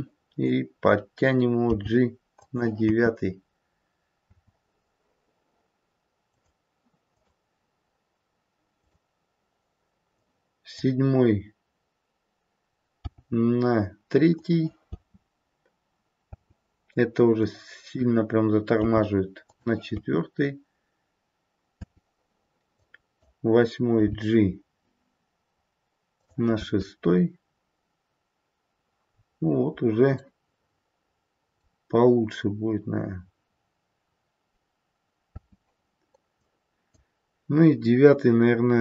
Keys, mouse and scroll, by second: 1.7 g, 2.8 space, 4.3 space, 6.3 click, 7.1 click, 10.1 click, 13.0 g, 14.9 space, 16.3 space, 17.3 click, 18.7 g, 19.9 space, 21.8 space, 22.7 click, 24.0 g, 26.5 space, 28.9-29.3 scroll up 2, 29.3-31.3 scroll down 1, 35.3-36.3 scroll down 2, 35.3 space, 36.3 click.